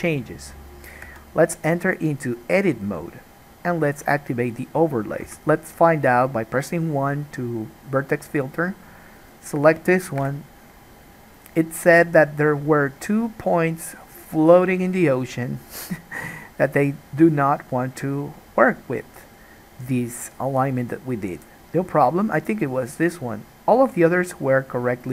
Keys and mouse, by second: 1.2 Tab, 4.1 click, 4.2-9.3 middle drag, 5.4 1, 9.3 click, 9.4-25.1 middle drag, 10.3 KP_Decimal.